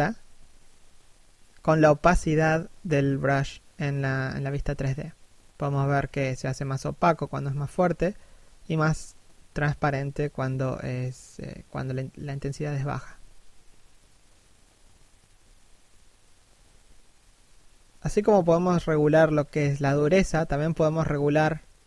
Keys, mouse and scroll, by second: 5.0 click, 6.8 shift+f, 7.8 click, 8.6 shift+f, 10.0 click, 12.3 ctrl+f, 14.4 ctrl+f, 18.8 click, 20.5 middle click, 21.1 3, 21.7 1.